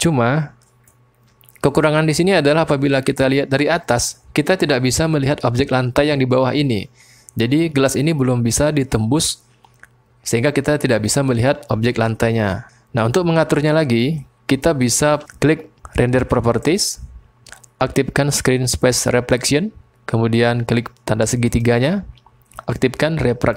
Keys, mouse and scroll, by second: 1.8 middle click, 2.2-2.9 drag, 2.9 middle click, 3.3-4.1 drag, 14.4-15.2 drag, 19.3 click, 21.5 click.